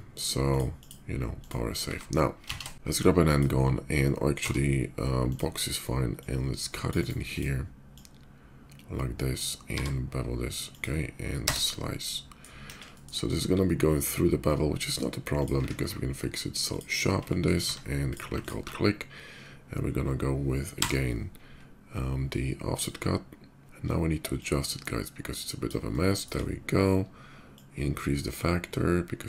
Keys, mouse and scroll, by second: 0.2 click, 0.5 click, 1.1 click, 2.7 d, 2.9 click, 4.9 click, 5.8-6.6 drag, 6.7 right click, 6.7 d, 7.1 click, 7.7-9.1 drag, 9.5 b, 10.5 click, 10.5 b, 11.2 space, 11.8-12.1 middle drag, 12.3 KP_5, 12.7 middle click, 13.1 middle click, 14.2 shift+middle drag, 14.5 shift+middle click, 15.0 shift+click, 15.8 ctrl+q, 16.4 click, 17.0 middle drag, 17.5 Tab, 17.8 click, 18.1 alt+click, 18.6 alt+middle click, 20.3 y, 22.5 click, 23.6 middle click, 24.1-25.4 shift+drag, 25.7 shift+middle click, 27.3-29.2 shift+drag.